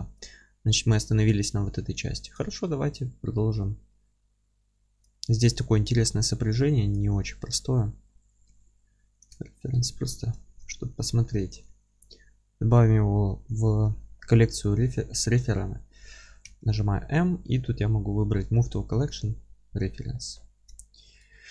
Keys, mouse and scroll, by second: 0.9 scroll up 2, 1.2-1.8 alt+middle drag, 1.8 scroll down 2, 2.1-5.2 middle drag, 5.2 scroll up 2, 5.4-5.8 middle drag, 5.8-6.1 scroll up 2, 6.1-6.5 scroll down 2, 6.5-6.9 middle drag, 6.9 click, 7.2 alt+q, 7.5-8.5 alt+middle drag, 7.7-8.5 scroll up 2, 8.5 s, 9.2 click, 9.4-10.8 alt+middle drag, 9.8-10.4 scroll up 1, 10.7 scroll up 2, 11.3-21.5 middle drag, 19.4-20.1 scroll down 1, 20.4-20.8 scroll up 1.